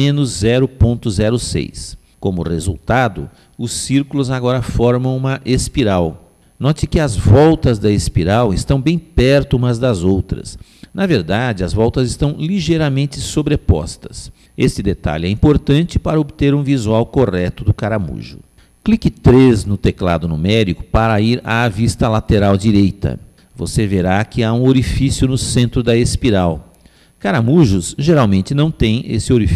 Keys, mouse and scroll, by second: 4.4-6.2 middle drag, 9.9-14.3 middle drag, 20.2 KP_3, 22.9-24.5 middle drag, 24.9-26.7 middle drag.